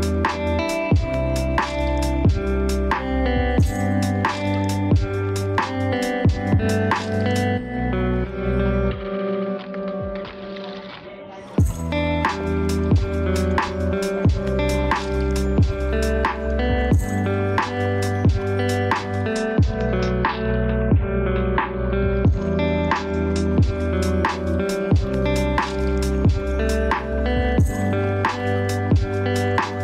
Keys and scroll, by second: 16.5 ctrl+d, 26.8 ctrl+space.